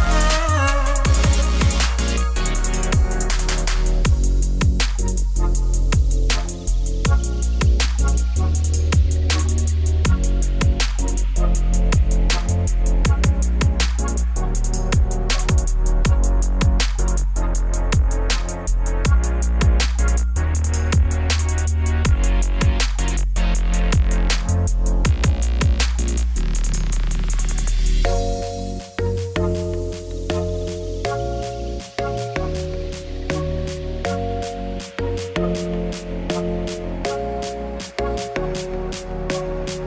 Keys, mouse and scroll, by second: 0.1 h, 0.4 ctrl+z, 0.5 g, 1.5 click, 1.7 ctrl+b, 2.2-2.5 scroll down 1, 2.5 scroll up 1, 2.7 ctrl+b, 4.8 click, 5.0 ctrl+x, 5.7 g, 6.7 click, 7.0 ctrl+b, 8.3 click, 8.5 g, 10.1 click, 10.2 g, 10.9 click, 11.2 Tab, 11.4 middle click, 11.5 scroll down 1, 11.7 middle click, 12.7 click, 13.8 click, 14.1 click, 14.3 ctrl+s, 14.5 middle click, 14.6 scroll down 1, 15.2 z, 15.5 middle click, 15.8-16.1 scroll up 4, 16.1 middle click, 17.0-17.5 scroll down 1, 17.5 middle click, 18.2 click, 18.7 middle click, 19.5 g, 20.5-21.5 middle drag, 21.5 scroll up 1, 21.8 shift+middle click, 22.0 click, 22.2 middle click, 22.4 Tab, 22.7 a, 23.9 middle click, 24.6-25.0 scroll down 1, 25.0 Tab, 25.1-26.3 middle drag, 27.7 middle click, 28.3 shift+a, 28.7 Tab, 28.8 s, 29.3 KP_7, 30.2 z, 31.3-31.7 scroll up 2, 31.7 g, 34.7 click, 34.9 g, 36.6 KP_1, 37.2 a, 38.9 click, 39.3 g.